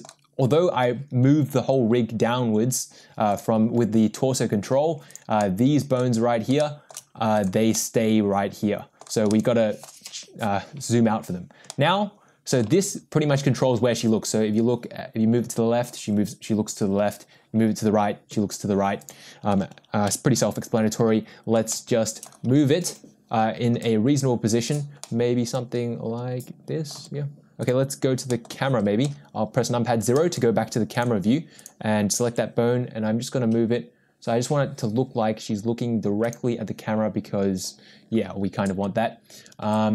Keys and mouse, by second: 3.3 click, 5.1 drag, 5.4-5.9 middle drag, 6.6-6.9 shift+middle drag, 7.4 drag, 7.7-9.0 middle drag, 9.3 middle click, 11.7-12.5 middle drag, 12.8 g, 20.1 n, 21.7 shift+middle click, 23.4 g, 25.0-26.9 middle drag, 27.4 g, 28.3 middle click, 29.0 KP_0, 30.9 click, 32.4 g, 39.7 g.